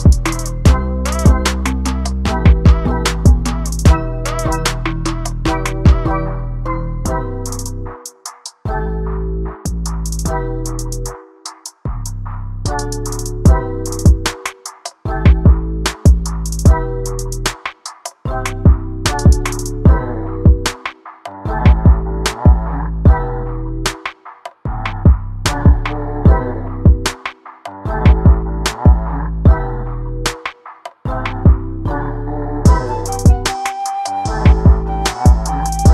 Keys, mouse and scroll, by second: 4.6 shift+f, 4.8 click, 10.7 click, 10.8 scroll down 1, 10.9 scroll up 1, 11.0 middle click, 11.2 space, 11.3 scroll down 1, 11.5 scroll up 1, 11.6 middle click, 12.5-13.0 scroll down 3, 12.6 shift+middle click, 13.0 shift+middle click, 13.1-13.7 scroll up 4, 15.2 click, 16.0 click, 16.6 scroll down 1, 16.7 alt+a, 16.8 shift+middle click, 16.9-17.4 scroll up 3, 17.0 middle click, 17.4 shift+middle click, 17.6 click, 17.8 Tab, 17.9 middle click, 18.4 click, 18.7 click, 18.8 s, 19.2 middle click, 19.5 click, 21.1 click, 22.3 o, 22.6 click, 23.8 Tab, 24.0 alt+a, 24.1 shift+middle click, 24.2 scroll up 2, 24.3 middle click, 24.5-25.1 scroll down 3, 24.6 middle click, 25.1 middle click, 25.2 click, 25.4 alt+a, 25.7-26.1 scroll down 2, 26.6 drag, 26.9-27.2 scroll up 5, 27.0 shift+middle click, 27.2 middle click, 27.3-27.6 scroll down 2, 27.4 middle click, 27.6 shift+middle click, 27.8 click, 28.3 click, 28.6 alt+a, 28.7 shift+middle click, 28.8-29.2 scroll up 4, 28.9 middle click, 29.2 click, 30.8 alt+a, 30.9 middle click, 31.2 click, 31.3-33.3 shift+middle drag, 33.3 click, 33.7-34.5 scroll down 1, 34.6 middle click, 35.0 a, 35.1-35.6 scroll up 2, 35.2 shift+middle click, 35.6 middle click.